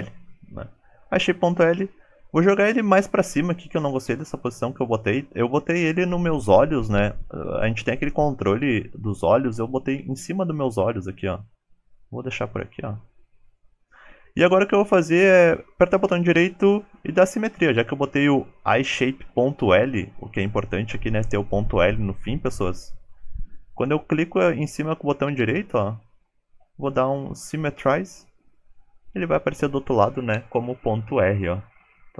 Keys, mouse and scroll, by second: 11.0 g, 22.8 shift+middle click, 23.4 scroll up 1, 24.2 click, 24.2 right click, 24.7 click, 25.5 right click.